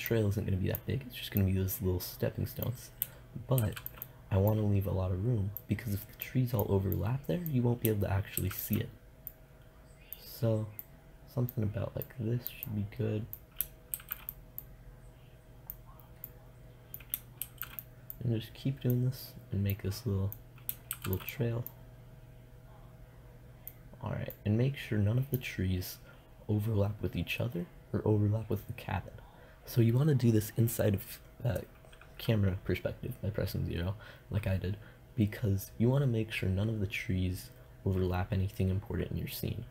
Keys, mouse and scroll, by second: 3.8 shift+d, 4.2-5.8 drag, 8.6 shift+d, 14.1 shift+d, 17.6 shift+d, 21.1 shift+d, 23.5 click, 23.6 middle click.